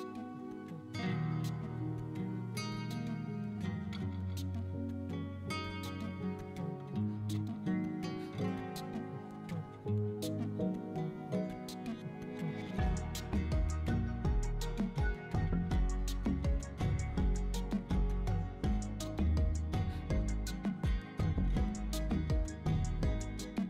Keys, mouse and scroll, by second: 0.0-1.7 typing, 0.3 KP_Enter, 0.5 middle click, 0.8 right click, 1.2 middle click, 1.5 middle click, 3.5 middle click, 3.9 middle click, 4.1-4.8 scroll down 7, 4.5 Tab, 4.6 middle click, 4.9 shift+middle click, 5.3 right click, 6.0 alt+z, 7.5 right click, 7.7 shift+middle click, 7.9 Tab, 8.0 middle click, 8.2 shift+middle click, 8.3 right click, 9.3 l, 10.7 click, 11.4 shift+click, 13.5 Tab, 14.3 click, 15.0 click, 15.6 middle click, 16.0 right click, 16.3 middle click, 16.6 shift+middle click, 16.7 scroll up 3, 16.8 middle click, 17.3 right click, 17.5 middle click, 17.5 scroll up 1, 17.7 scroll down 4, 17.9 shift+middle click, 18.4 w, 18.8 middle drag, 19.0 scroll up 2, 19.2 scroll down 5, 19.4 shift+middle click, 19.9 middle click, 20.3 middle click, 20.5 ctrl+s, 21.0 click, 21.2 middle click, 21.4 scroll up 1, 21.5 middle click, 21.8 shift+middle click, 22.6 scroll down 2, 22.8 right drag.